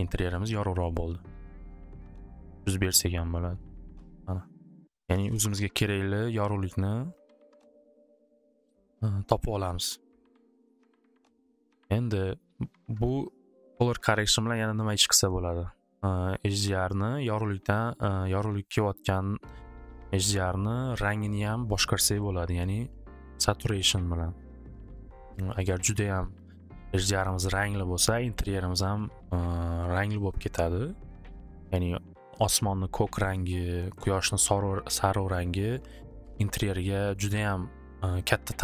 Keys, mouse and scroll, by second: 1.0-5.7 typing, 5.3 Return, 7.4-8.1 typing, 9.6 typing, 10.8 click, 15.0 click, 17.6-20.1 drag.